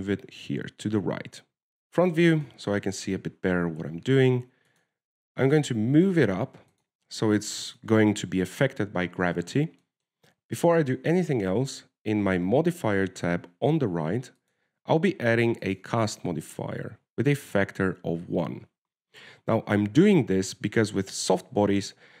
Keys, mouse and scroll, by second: 0.6 middle click, 1.1 g, 2.6 KP_1, 3.6 shift+scroll up 1, 3.8 shift+middle click, 4.2-4.9 scroll up 4, 4.9 g, 6.8 g, 8.4-8.9 scroll down 6, 9.1 shift+middle click, 10.7-11.0 scroll up 4, 11.1 shift+middle click, 11.4 w, 12.1 click, 13.8 w, 15.7 click, 17.8 click.